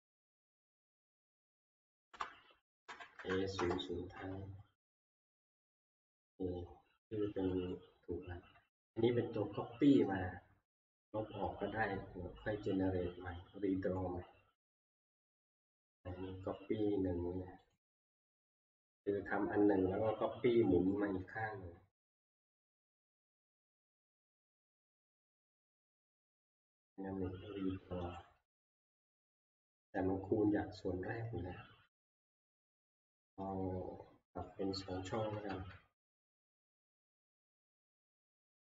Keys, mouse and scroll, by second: 1.1 click, 1.9 Down, 2.1 Left, 2.8 Right, 3.2 typing, 3.6 Return, 7.7 middle click, 8.9 click, 10.5 middle click, 10.5 middle click, 10.6 middle click, 11.0 middle click, 11.4 middle click, 11.5-12.6 scroll up 22, 13.1 scroll up 4, 14.2-16.1 scroll down 28, 16.8 scroll down 1, 17.8 click, 18.8 middle click, 20.8 scroll, 21.2 Delete, 22.7 click, 23.3 click, 23.8 right click, 28.2 click, 31.9 middle click, 32.1-33.2 scroll, 33.4-34.4 scroll, 34.8 click, 35.5 2, 37.2 click.